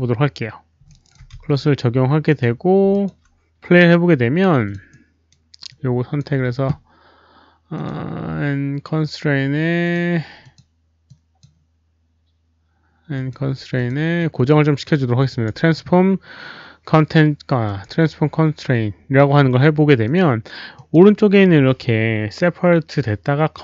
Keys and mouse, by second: 0.8 alt+right click, 1.3 click, 1.3 z, 1.8 alt+right click, 1.8 z, 2.2 click, 2.3 alt+right click, 2.3 z, 2.9 alt+click, 4.6 alt+click, 4.6 z, 4.9 right click, 5.6 alt+click, 7.7 alt+click, 7.7 alt+right click, 7.7 z, 9.8 alt+click, 9.8 alt+right click, 9.8 z, 10.4 alt+click, 11.0 alt+click, 12.1 alt+click, 12.1 right click, 13.1 alt+click, 13.1 right click, 13.7 click, 13.7 right click, 14.1 click, 14.2 right click, 15.2 click, 15.4 right click, 16.1 click, 16.5 click, 17.6 click, 20.0 click, 20.7 drag.